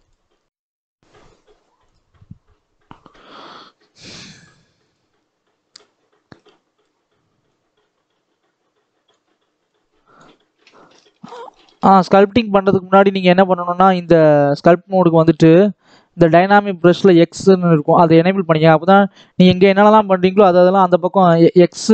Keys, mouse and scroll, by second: 0.5-4.8 middle drag, 4.8-10.9 drag, 10.9 ctrl+z, 11.2 ctrl+z, 11.9 ctrl+z, 13.0 ctrl+s, 13.6 click, 15.2-17.8 drag, 18.9-21.9 drag.